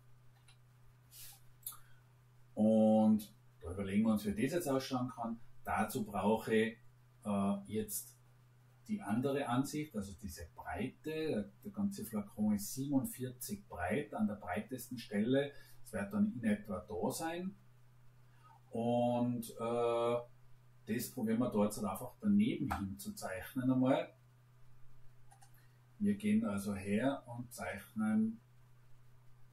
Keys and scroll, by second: 0.3 Delete.